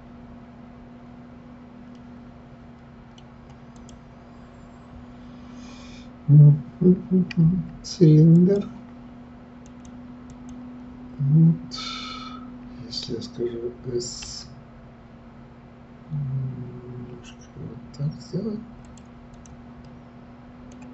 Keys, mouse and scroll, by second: 1.9-3.7 middle drag, 3.7 click, 8.3 click, 9.6-12.6 drag, 14.2 s, 19.3 click, 19.8-20.9 middle drag.